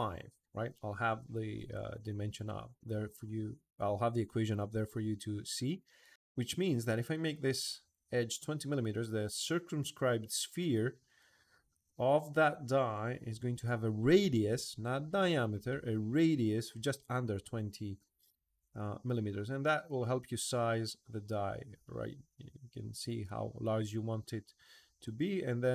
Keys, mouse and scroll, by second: 24.8 click.